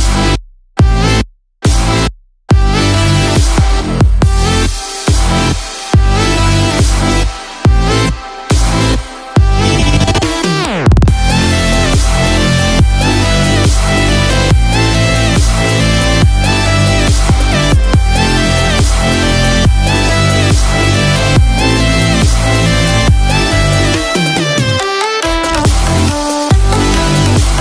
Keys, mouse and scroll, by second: 1.0 click, 1.4 middle click, 3.7 middle click, 3.7-4.1 scroll up 1, 4.1 scroll down 1, 5.7 middle click, 5.7 click, 7.4 middle click, 7.8 click, 8.2-8.7 scroll down 1, 8.7 shift+s, 11.6 middle click, 12.1-12.4 scroll down 2, 12.4 middle click, 12.9 scroll up 1, 13.5 KP_7, 14.1-14.5 scroll up 5, 14.5 shift+middle click, 15.1 click, 15.4 scroll down 1, 16.1 r, 21.5 click, 24.3-24.8 scroll down 1, 24.8 scroll up 1, 26.2 click.